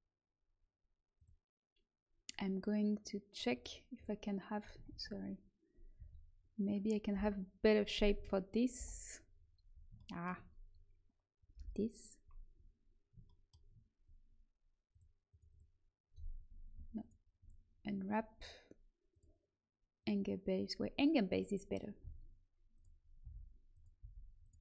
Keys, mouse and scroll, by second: 1.1-3.5 drag, 4.8 ctrl+z, 5.9 a, 7.1 l, 8.1 a, 8.7 l, 11.5 l, 14.9-17.7 drag, 19.1-21.4 drag, 21.9 s, 23.1 r, 23.9 g.